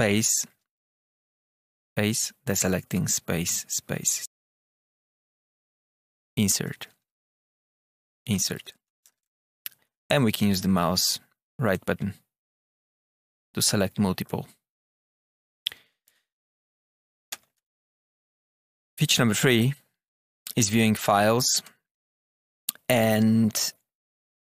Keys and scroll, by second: 0.1 Down, 1.8 Up, 2.9 space, 3.1 Down, 3.4 space, 3.9 Down, 4.0 space, 4.4 Down, 5.1 Up, 6.1 Insert, 7.2 Up, 8.0 Insert, 8.9 Up, 16.0 Up, 16.9 Up, 17.3 Return, 18.0 Tab, 18.4 Return, 21.4 Tab, 21.9 Down.